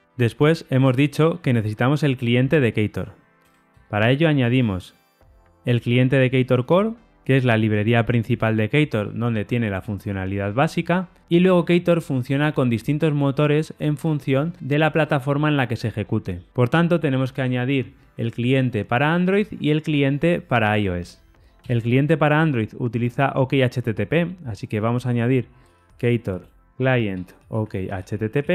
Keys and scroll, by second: 7.1 Tab.